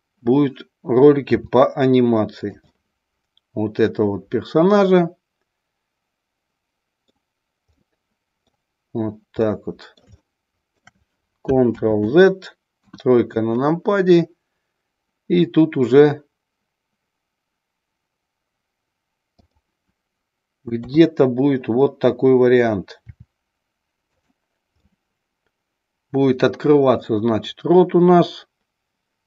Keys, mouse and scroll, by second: 1.3 r, 2.4-2.8 drag, 2.8-7.0 middle drag, 7.8-8.7 middle drag, 9.5-10.9 middle drag, 11.8 ctrl+z, 12.8 KP_1, 19.3 click, 20.9 KP_3, 23.1 r, 24.3 click, 24.8-27.0 middle drag.